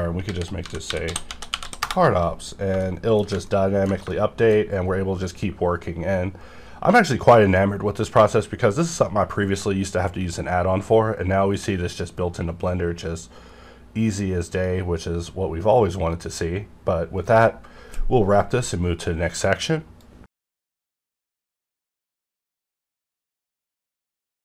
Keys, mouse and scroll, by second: 0.2-1.6 typing, 1.8 Return, 2.8 shift+middle click, 3.5 ctrl+middle click, 4.1 shift+middle click.